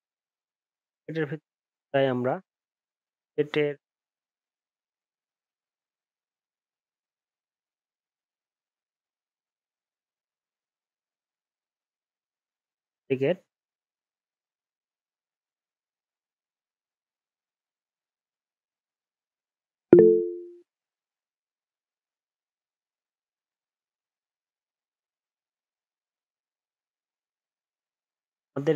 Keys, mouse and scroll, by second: 5.3 ctrl+z, 5.8 ctrl+shift+z, 10.0 ctrl+j, 10.7 ctrl+z.